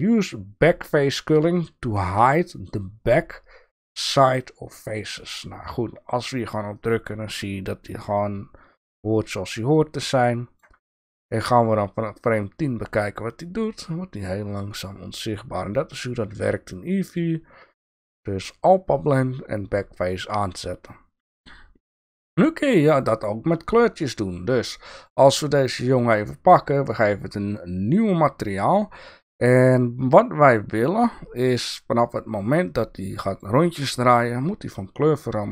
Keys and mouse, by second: 6.7 click, 9.1-10.6 drag, 11.3 shift+drag, 11.4 shift+middle click, 12.4-17.1 drag, 22.0 shift+middle click, 22.9 click, 25.8 click, 29.3-33.4 drag.